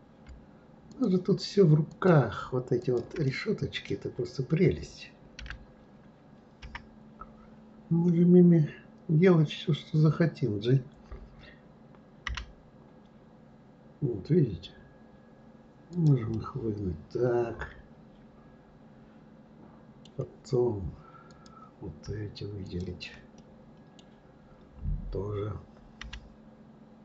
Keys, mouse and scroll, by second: 0.9 shift+click, 1.9 shift+click, 2.8 shift+click, 3.2-5.4 middle drag, 5.4 d, 6.5 KP_1, 16.3-19.3 middle drag, 21.3 click, 22.6 shift+click, 22.7 shift+right click, 23.4-26.0 middle drag, 26.0 g.